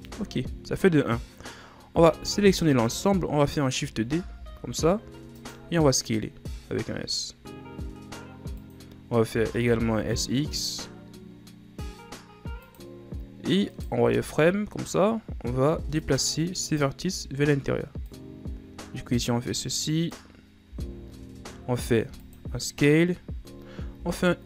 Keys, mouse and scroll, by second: 0.1 z, 2.1 a, 2.4 a, 4.4 shift+d, 6.0-6.6 ctrl+scroll up 2, 6.6 s, 9.5 s, 13.9 right click, 14.1 z, 15.8 b, 17.2 z, 18.2-20.8 drag, 20.8 s, 24.2 i.